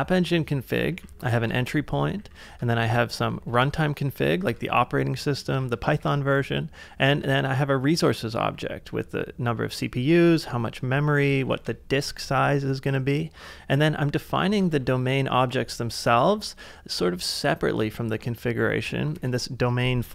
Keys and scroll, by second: 0.0-2.2 typing, 2.6 ctrl+c, 3.4 shift+v, 4.5 ctrl+c, 4.6 j, 5.5 j, 5.9 shift+6, 7.1 j, 8.4 j, 9.9-10.8 typing, 11.1 ctrl+c, 12.2 ctrl+c, 14.6 ctrl+w, 14.7 h, 16.3 j, 19.2 Return.